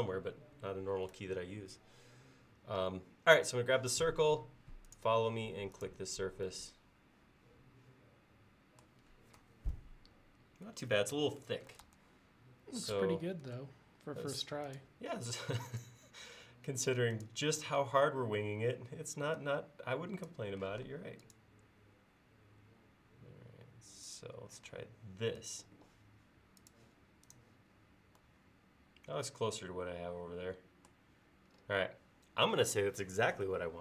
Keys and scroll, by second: 11.9 super+z, 13.5 space, 15.3 m, 17.9 space, 20.8 m, 24.8 space.